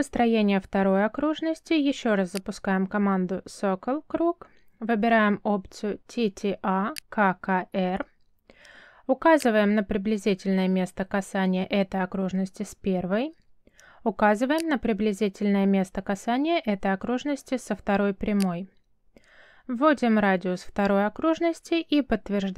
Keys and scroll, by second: 5.3 c, 6.1 space.